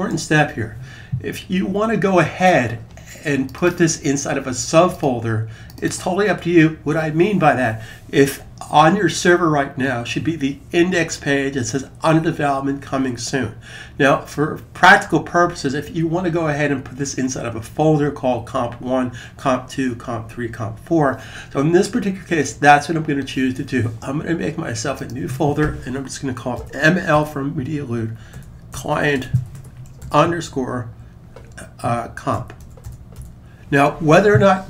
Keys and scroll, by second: 26.3-30.3 typing, 31.9-33.4 typing.